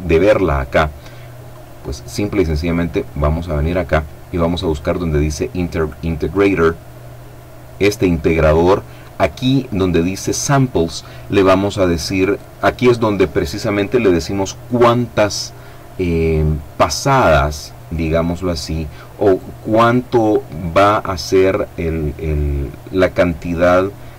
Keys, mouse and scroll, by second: 0.7 click, 2.2-3.2 scroll down 1, 5.4 click, 5.9-7.1 scroll down 1.